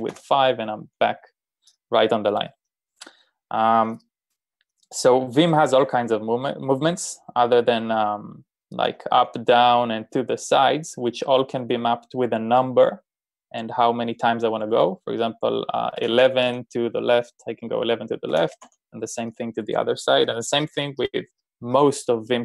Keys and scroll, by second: 0.0-0.6 typing, 8.6-10.7 typing, 15.8-16.9 typing, 18.2-19.1 typing.